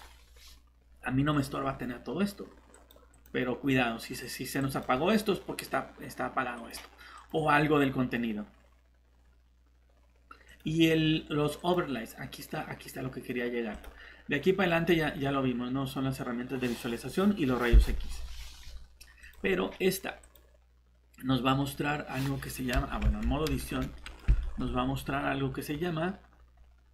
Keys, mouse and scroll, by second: 3.7 Escape, 3.7 click, 14.5-16.6 scroll down 1, 18.1 scroll up 1, 19.2 click, 21.6-22.0 scroll down 1, 23.0 Tab, 23.6 a, 24.0 middle click, 24.7-26.5 scroll up 1, 26.5-26.9 scroll down 1.